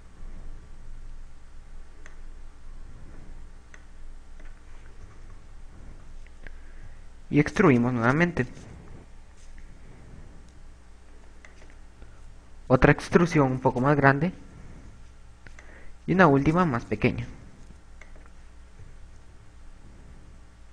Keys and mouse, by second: 3.1 click, 4.9 click, 5.6-7.5 typing, 8.8 e, 12.6 click, 14.8 e, 16.7 click, 17.0 e, 18.4 click, 18.8 KP_8, 20.1-20.7 typing.